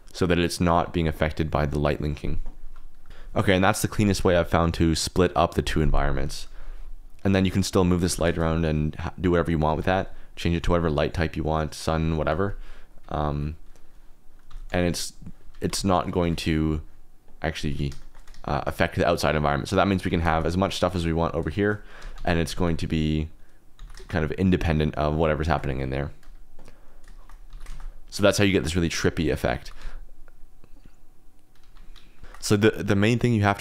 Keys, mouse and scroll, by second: 3.1 KP_0, 7.5 click, 7.8 middle click, 8.0 g, 8.2 shift+z, 9.6 Escape, 12.0 click, 12.8 click, 13.1 1, 13.2 1, 14.4 r, 14.6 z, 15.4 Escape, 15.7 ctrl+z, 16.2 ctrl+z, 18.0 shift+click, 19.4 click, 19.7 click, 20.1 alt+d, 20.3 shift+z, 20.7 click, 21.9 r, 22.1 z, 22.3 click, 22.4 g, 22.6 x, 23.2 click, 23.7 alt+d, 23.9 shift+z, 25.4 shift+click, 27.5 alt+d, 27.7 shift+z, 28.1-29.1 drag, 29.3 middle click, 29.6 g, 29.8 x, 31.6 Escape, 32.2 shift+click.